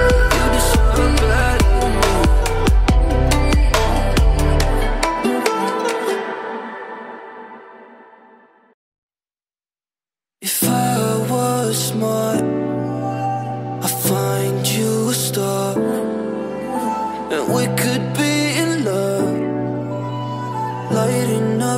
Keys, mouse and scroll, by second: 5.1-6.1 drag, 10.0 space, 10.1 click, 10.5 alt+scroll up 1, 11.0-11.9 drag, 14.1 space, 14.3 click, 14.4 space, 14.9 click, 15.1 space, 15.8-17.3 drag.